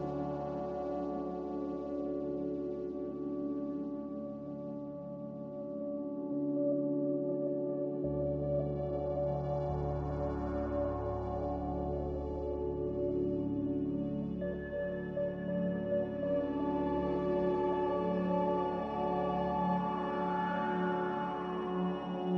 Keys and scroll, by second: 0.0 typing, 0.2 Return, 3.2 typing, 3.3 Return, 5.9 5, 8.5 z, 10.3-11.1 typing, 10.6 Return, 13.5 q, 15.4 q, 21.5 x.